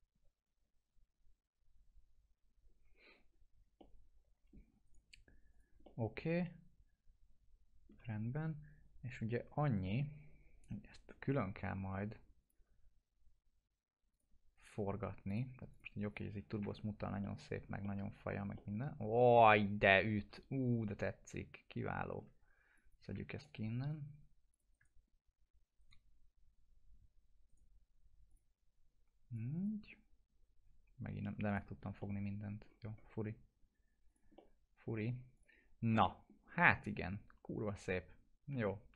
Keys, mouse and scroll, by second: 3.1-3.6 scroll down 2, 3.8-4.7 alt+middle drag, 4.9 right click, 5.5 click, 5.9-8.0 alt+middle drag, 12.4 click, 14.6 right click, 14.6 right click, 15.3 click, 16.6 F4, 16.9 scroll down 1, 17.2-18.2 alt+middle click, 18.1 scroll down 1, 22.4 scroll down 1, 22.8 click, 23.4-24.1 ctrl+click, 24.7 ctrl+right click, 25.8 right click, 28.3 click, 30.7 alt+q, 31.5 click, 32.0-32.6 alt+middle click, 32.7 scroll up 1, 34.1 click, 34.4-35.3 alt+middle click, 35.4 click, 35.4 click, 35.8-36.1 scroll down 1, 36.1 middle click, 36.4 scroll down 1, 36.7-38.5 alt+middle drag, 38.8 scroll down 1.